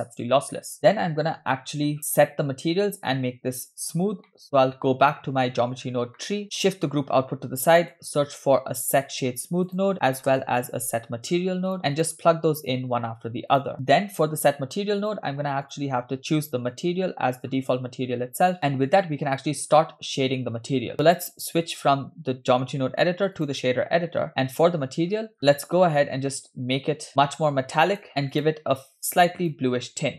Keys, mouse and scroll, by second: 1.0-1.8 scroll down 3, 1.8 scroll up 2, 2.0 click, 4.3 shift+middle click, 5.8-6.2 scroll down 2, 6.2 middle drag, 6.4 click, 6.4 scroll up 2, 7.4 g, 9.0 shift+a, 12.4 shift+s, 13.5 click, 13.7 shift+a, 15.7-17.1 drag, 17.6 scroll up 1, 18.8-19.6 scroll down 3, 21.1-23.5 drag, 25.1 scroll down 2, 25.4 scroll up 3, 25.7-28.0 shift+drag, 28.4 click.